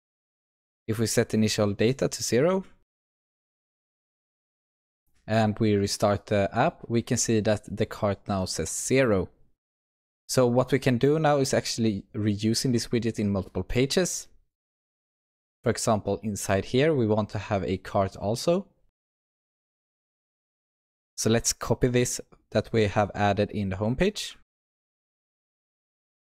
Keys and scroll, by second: 0.1 Return, 1.9 ctrl+s, 3.4 shift+F10, 24.4 ctrl+c, 25.1 ctrl+p, 25.5 ctrl+z.